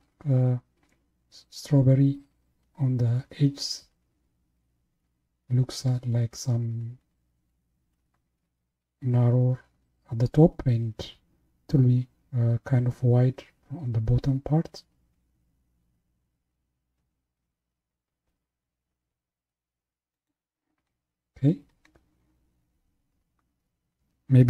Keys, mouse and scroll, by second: 21.0-21.6 scroll down 1.